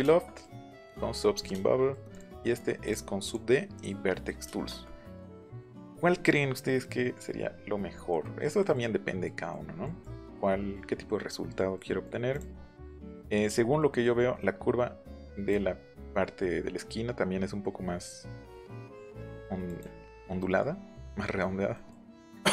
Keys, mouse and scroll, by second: 2.0 click, 2.8 click, 3.5 scroll down 4, 4.4 shift+middle click, 8.0-8.5 scroll down 3, 8.1 middle click, 8.5 middle click, 9.2 middle click, 9.7 scroll down 1, 9.7 scroll up 1, 11.7 middle click, 12.2 click, 13.1 middle click, 13.7 middle click, 15.2 click, 19.6 click, 20.3 middle click, 20.8 scroll down 1, 21.7 scroll up 2, 22.1 scroll down 2.